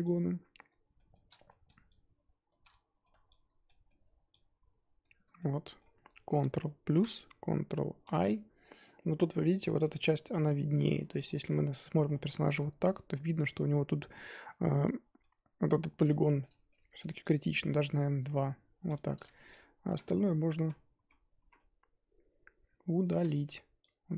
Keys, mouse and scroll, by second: 0.7 shift+click, 0.9-2.4 shift+middle drag, 2.4 shift+click, 2.6 middle click, 3.4 shift+click, 3.6-5.0 shift+middle drag, 5.0 shift+click, 5.3 middle click, 5.9 scroll down 2, 6.1 middle click, 6.9 ctrl+KP_Add, 8.0 ctrl+i, 8.9 middle click, 9.4 scroll down 1, 9.6-10.9 middle drag, 10.9-11.3 scroll down 7, 11.3-11.8 middle drag, 11.8-14.3 scroll up 11, 12.1 middle drag, 15.2-18.2 middle drag, 18.2 ctrl+Left, 18.9-21.4 middle drag, 21.4 z, 21.5-23.2 middle drag, 23.2 z, 24.1 scroll down 3.